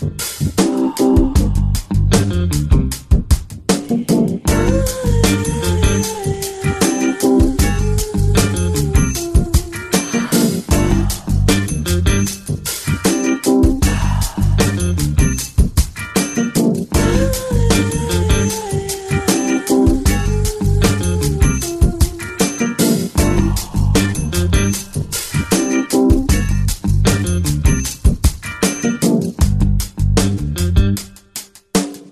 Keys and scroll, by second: 2.5 ctrl+z, 3.9 ], 4.1 ], 4.3 ], 6.7 space, 21.9 ctrl+space, 26.5 ctrl+t.